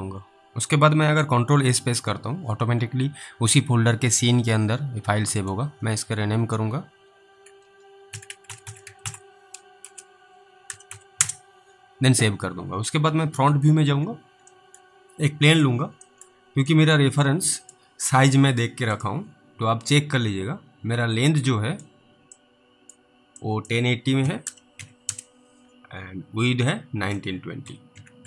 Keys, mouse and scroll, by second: 1.7 ctrl+s, 5.4 click, 7.9-11.4 typing, 13.9 alt+w, 14.8 middle click, 15.6 click, 16.3 middle click, 17.0 click, 18.1 w, 19.0 click, 21.7 click, 22.6 click, 23.7 click, 24.0-25.6 typing, 27.0 click, 27.6-28.2 typing.